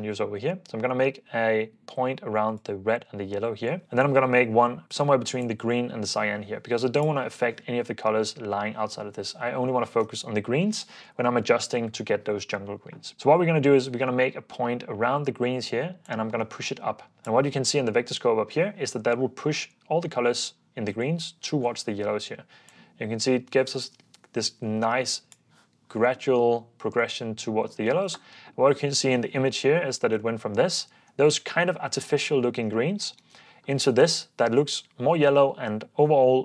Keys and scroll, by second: 28.2 super+f, 30.0 super+d, 30.0 super+f, 30.2 super+d, 33.2 super+d, 35.3 super+d.